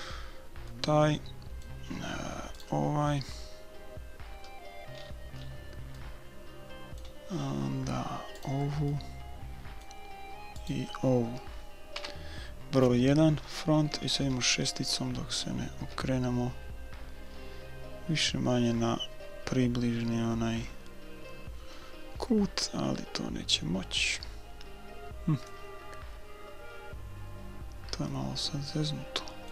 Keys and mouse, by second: 0.5 right click, 0.7 click, 1.2-2.4 middle drag, 2.6 right click, 3.2 middle click, 3.4 click, 3.7 middle click, 4.3 click, 4.4-8.4 middle drag, 8.4-9.8 right drag, 8.9 click, 10.9-11.9 right drag, 11.9 click, 11.9 KP_1, 12.2 right click, 14.1-15.8 typing, 17.3 KP_6, 19.1 KP_6, 22.1 KP_4, 24.1 KP_6, 26.6-29.5 middle drag.